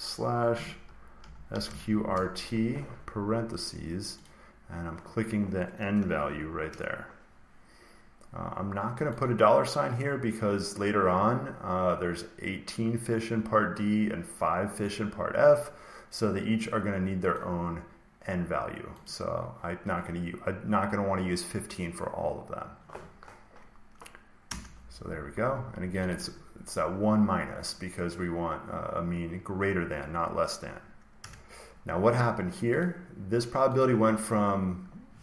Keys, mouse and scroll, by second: 0.0-2.3 typing, 4.1 click, 9.1 click, 17.2 click, 19.0 click, 24.3 Return, 25.9 click, 26.1 click, 31.1 Return, 32.7 click, 33.7 click.